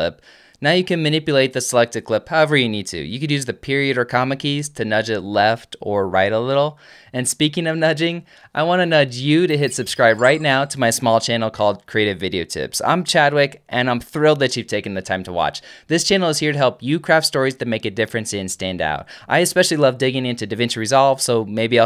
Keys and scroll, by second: 1.0 alt+/, 3.2 space, 4.4-5.3 typing.